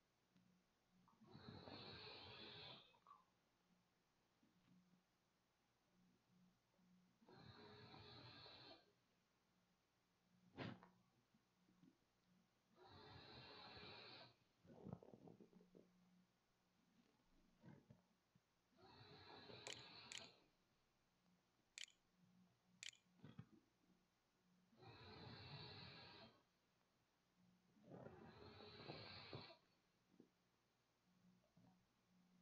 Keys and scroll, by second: 0.8-1.6 typing, 18.4-21.5 typing, 22.1 ctrl+a, 22.4 ctrl+s, 23.1 a.